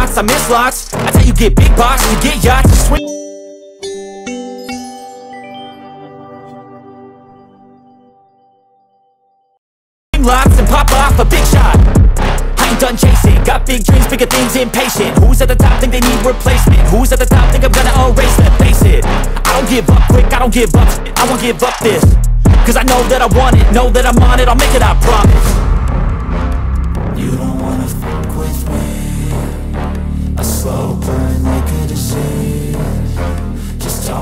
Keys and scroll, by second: 0.0 ctrl+t, 9.6 ctrl+t.